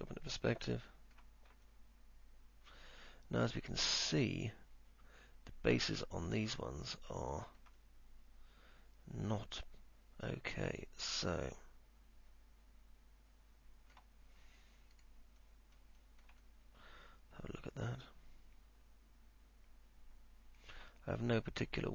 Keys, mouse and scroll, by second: 0.8 alt+middle click, 1.8-5.8 alt+middle drag, 1.8-2.6 alt+scroll up 1, 6.5 middle click, 6.5-6.8 scroll up 1, 8.0-14.1 alt+middle drag, 16.6-21.0 alt+middle drag.